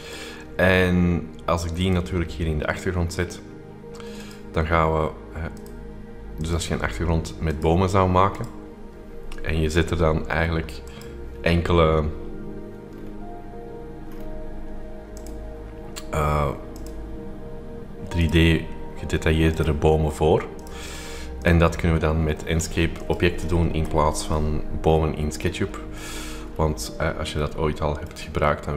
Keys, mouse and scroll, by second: 1.8 click, 4.1 click, 5.5 click, 6.5 click, 7.4-9.2 drag, 10.8 click, 12.9-13.7 scroll down 2, 14.0-14.8 scroll down 2, 15.2 click, 16.7 click, 18.2-19.2 drag, 19.4-20.6 drag, 20.7-22.1 drag, 22.1-23.4 scroll up 3, 23.4 click, 23.8 Delete, 23.8 click, 24.5-26.4 scroll up 2, 26.4-27.2 scroll down 2, 27.6-28.7 shift+middle drag, 27.6-28.7 shift+scroll up 2.